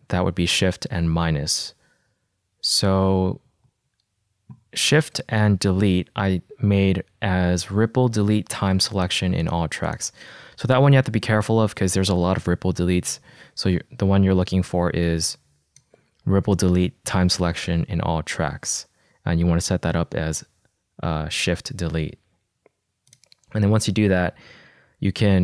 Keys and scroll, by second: 11.0 r, 11.6 l, 12.0 e.